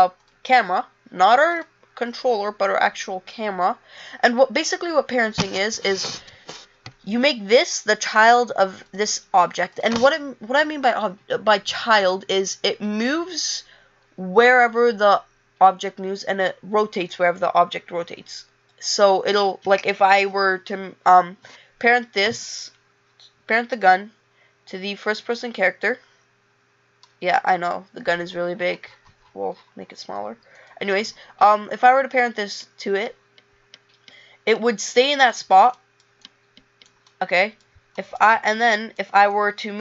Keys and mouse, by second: 22.8 click, 26.7 click, 31.3 click, 34.4 click.